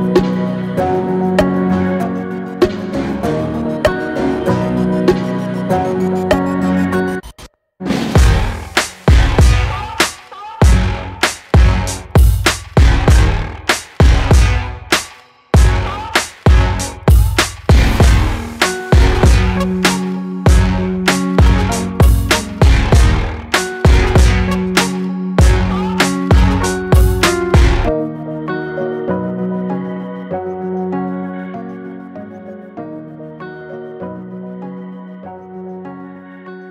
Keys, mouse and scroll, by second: 0.5 shift+click, 1.4 s, 5.0 click, 6.5 s, 9.1 scroll down 1, 9.4 Tab, 9.7 scroll down 2, 10.0-12.0 middle drag, 12.0 drag, 12.3 alt+z, 13.0 click, 13.5-15.4 middle drag, 17.6 Tab, 18.8 alt+click, 19.4 alt+click, 20.0-21.1 middle drag, 21.1 alt+shift+click, 21.5 scroll up 1, 21.9-23.6 middle drag, 23.6 s, 28.3 alt+middle click, 28.6 alt+middle click, 29.1 shift+middle click, 29.5-29.8 scroll down 1, 29.8 alt+z, 30.9 click, 31.4 click, 33.0 shift+click, 34.3 s.